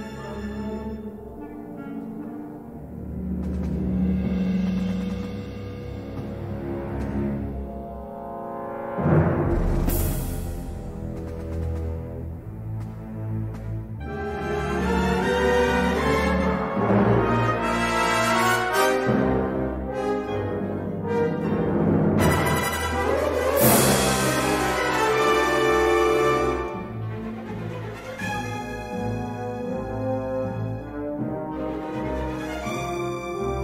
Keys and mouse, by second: 0.5-1.6 middle drag, 2.3 middle click, 3.2 l, 3.9 l, 4.4 middle click, 5.3 middle click, 6.0 middle click, 7.9 2, 8.9 shift+a, 11.2 shift+s, 17.5 ctrl+z, 18.7 shift+a, 26.3 click, 27.3 s, 27.9 g, 30.2 a, 33.1 a, 33.3 s.